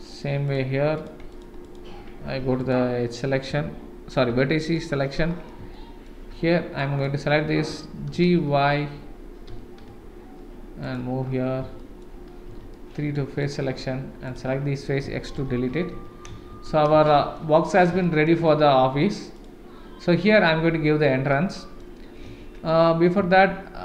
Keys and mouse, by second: 0.4 click, 1.0 click, 1.3 click, 2.2 1, 2.6 click, 4.3 KP_7, 5.7 shift+middle click, 6.8 click, 8.1 g, 11.8 shift+middle click, 12.5 3, 12.7 middle click, 13.4 click, 14.2 click, 15.0 x, 15.9 Tab, 16.5 shift+z, 17.0-17.3 shift+middle drag, 18.0 shift+middle drag, 18.4-19.0 middle drag, 21.3-21.8 middle drag.